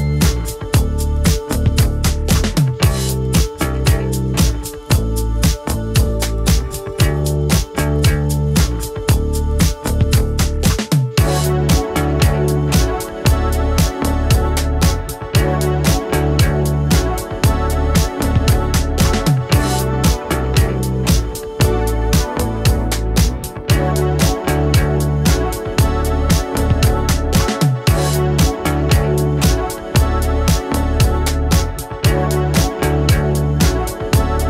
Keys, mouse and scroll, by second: 3.5 click, 7.4-9.2 typing, 9.8 ctrl+a, 10.6 click, 10.7-12.1 typing, 13.0 click, 16.7-19.1 typing, 17.5 Return, 19.7 click, 23.8 right click, 25.3 click, 26.0 right click, 27.1-34.4 drag.